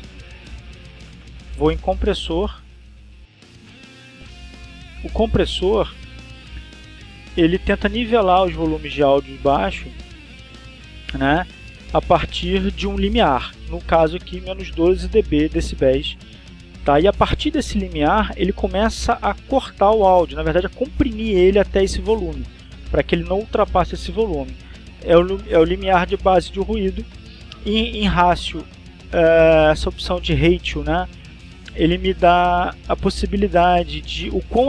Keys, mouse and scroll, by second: 0.5 click, 1.7 click, 2.3 middle click, 2.6 click, 6.3-7.3 drag, 7.3 middle click, 33.5-34.6 drag.